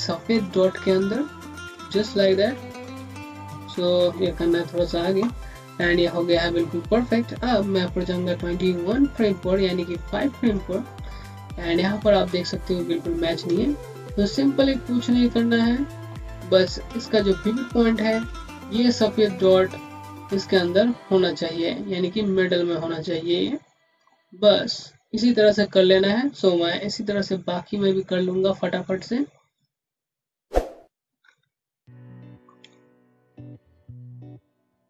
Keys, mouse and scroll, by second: 3.3 alt+Right, 10.3 Right, 10.4 click, 10.9 scroll up 1, 13.7 scroll up 1, 13.9 click, 25.8 scroll down 1, 29.2 scroll down 1, 29.2 scroll up 1, 30.8 click, 31.6 click, 32.7 click, 34.0 Up, 34.3 Down.